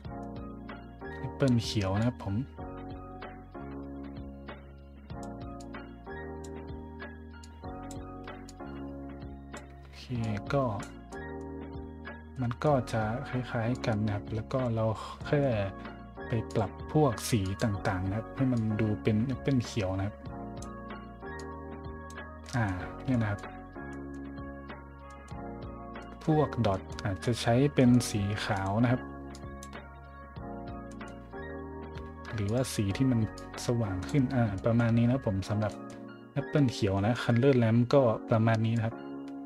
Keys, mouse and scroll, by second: 1.9-5.2 drag, 5.6-6.4 drag, 7.4-7.8 drag, 8.5-9.5 drag, 10.2-10.8 drag, 11.1 middle drag, 12.3-12.6 middle drag, 13.7 click, 15.2 middle click, 15.7 scroll down 1, 16.5 click, 17.4 click, 18.5-20.6 drag, 21.3 click, 22.4 middle drag, 23.1 middle drag, 23.8 middle drag, 24.7 middle click, 25.0 middle drag, 26.0 middle click, 26.7 middle click, 27.2 middle click, 27.8 middle click, 28.5 click, 29.3 drag, 30.8 middle drag, 31.3 middle click, 32.4 click, 33.3 click, 34.5 scroll up 1, 35.2-35.8 scroll up 2, 36.4-37.1 scroll up 2, 37.3 scroll down 1, 37.8 scroll up 1, 37.8 scroll down 1, 38.7-39.4 drag.